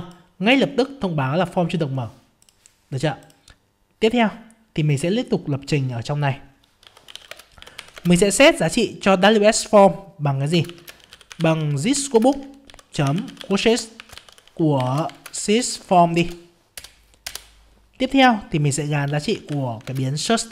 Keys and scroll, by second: 7.9 ctrl+space, 12.2 ctrl+space, 15.1 ctrl+space, 19.9 ctrl+space.